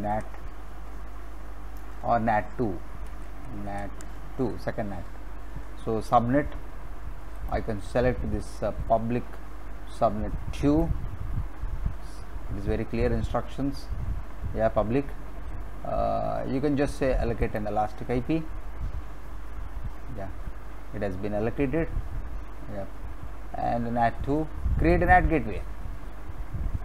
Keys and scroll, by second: 0.1 y, 0.7 n, 1.9-4.4 typing.